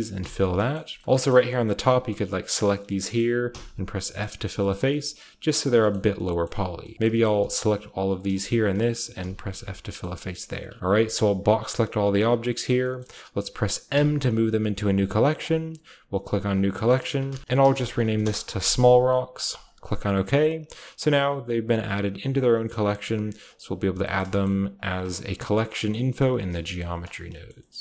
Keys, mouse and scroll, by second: 0.1 typing, 0.7 click, 1.7 shift+click, 2.1 shift+click, 2.4 shift+click, 2.7 shift+click, 2.8 middle click, 2.9-3.9 scroll up 1, 3.1 typing, 3.9-5.6 scroll down 3, 4.2 middle click, 4.4 shift+middle click, 4.7 shift+middle click, 4.8 typing, 5.6 shift+middle click, 5.7-6.1 shift+scroll down 1, 6.9-8.2 shift+middle drag, 7.1-8.7 scroll up 1, 9.1-11.1 typing, 9.4 Tab, 9.6-10.5 scroll down 1, 10.5-11.1 middle drag, 11.1 scroll down 1, 11.4 middle click, 11.4-12.0 drag, 13.9-14.3 typing, 15.3-17.0 drag, 17.1-18.7 typing, 19.6-24.3 drag, 20.7-21.8 scroll down 1, 21.8-23.0 scroll down 1, 23.8-25.5 scroll down 1, 24.0 shift+middle drag, 24.3-27.8 typing, 25.9-27.5 scroll up 1, 26.6-27.8 shift+middle drag.